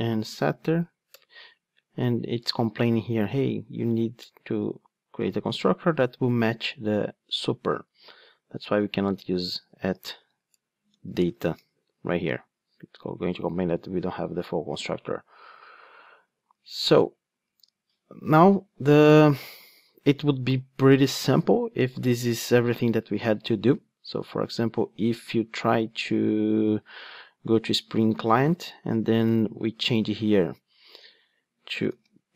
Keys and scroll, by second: 11.6 Return, 16.1 super+z, 16.8 super+z.